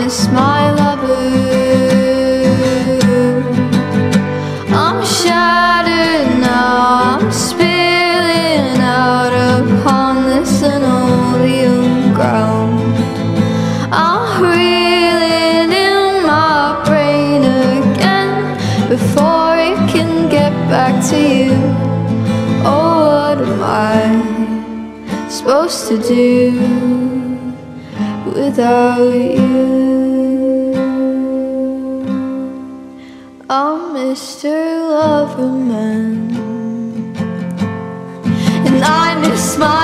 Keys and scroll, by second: 9.5 ctrl+z, 24.3 r, 26.5-29.3 typing, 30.7 space, 33.3 space, 35.8 BackSpace, 35.9 4, 37.0 space.